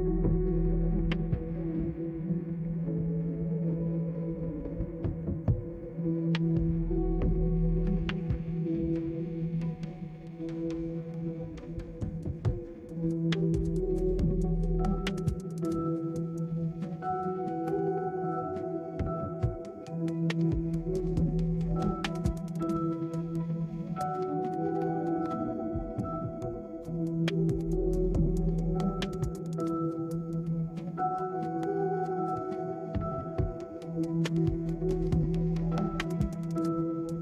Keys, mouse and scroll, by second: 3.2-4.4 right drag, 9.9 right click, 13.0 click, 13.7 middle click, 14.1-19.1 right drag, 20.7 right click, 23.8 right click, 25.3 click, 28.7 middle click, 29.2-30.7 middle drag, 29.2 scroll down 2, 29.4-30.1 scroll up 2, 34.0 click.